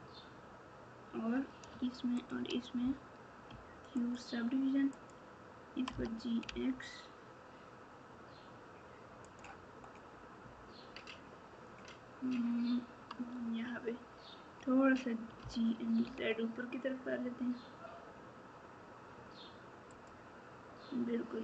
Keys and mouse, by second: 4.9 click, 15.4 g.